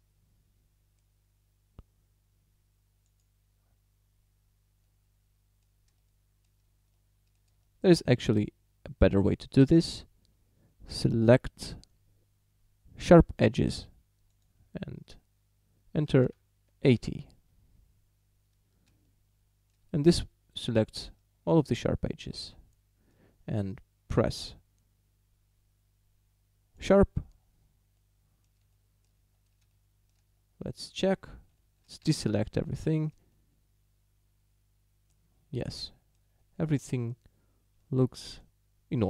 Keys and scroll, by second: 16.1 8, 16.3 0, 16.9 Return, 32.1 a.